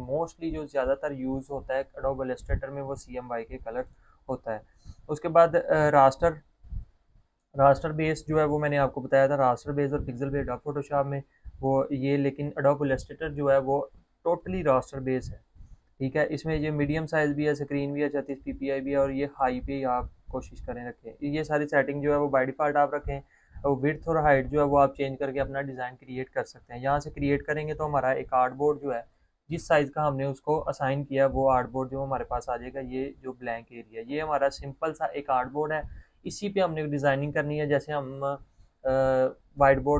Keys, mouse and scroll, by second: 4.9 click, 20.4 click, 21.0-21.6 scroll down 1, 21.6-22.2 scroll up 1, 27.9 click.